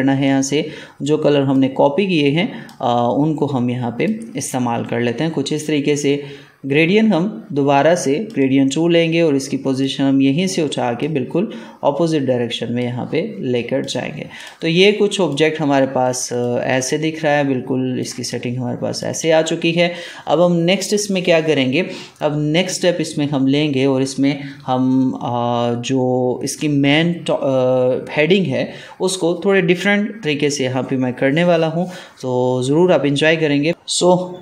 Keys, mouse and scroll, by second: 0.1-6.9 drag, 8.2-13.7 drag, 16.4 click, 16.7 ctrl+space, 16.7 ctrl+click, 17.1 ctrl+space, 18.2 click, 18.6 space, 33.7 space.